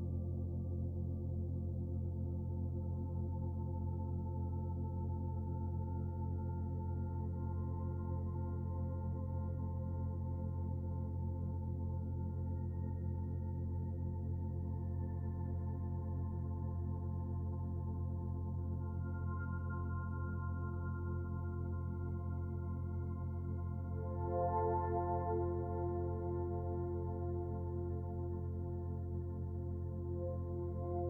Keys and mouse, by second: 2.4 click, 3.3 Tab, 3.8 Tab, 4.3 Tab, 6.8-8.8 middle drag, 9.3-10.1 middle drag, 10.4 Tab, 14.7 ctrl+r, 20.9 ctrl+z, 21.5 click, 23.1 ctrl+r, 30.6 Tab.